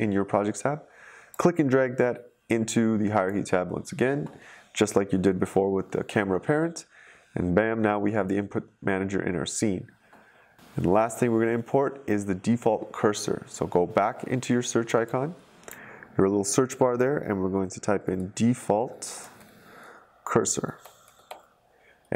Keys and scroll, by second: 17.6-21.6 typing.